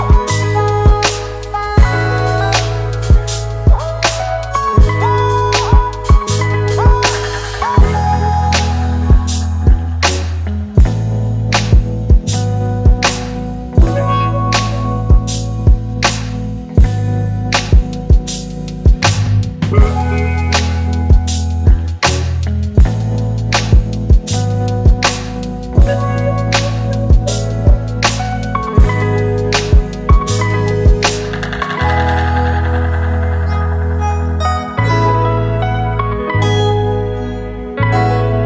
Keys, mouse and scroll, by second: 2.5-3.3 typing, 3.3 double click, 18.3-18.6 typing, 19.9 double click, 26.7 ctrl+click, 28.1 right click, 33.6 alt+click.